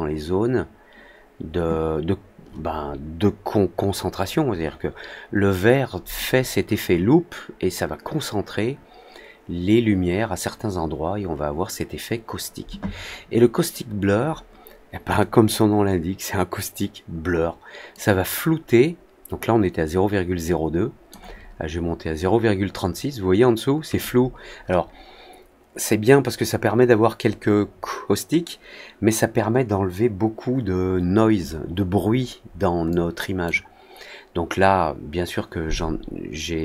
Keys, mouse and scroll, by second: 17.8-21.0 drag, 32.8-33.4 drag.